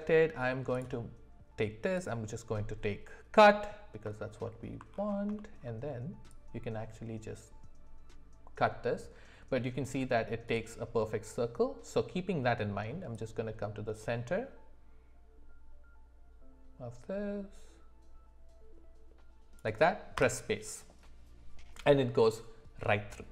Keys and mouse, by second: 4.4 alt+middle click, 5.4 shift+middle click, 6.4-10.9 drag, 13.1 click, 13.4-20.9 drag.